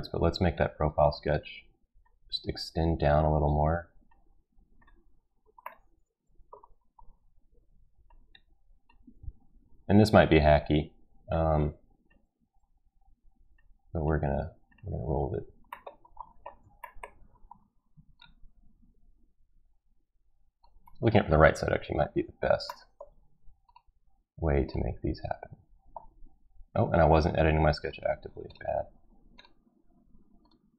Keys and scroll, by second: 9.6 ctrl+z.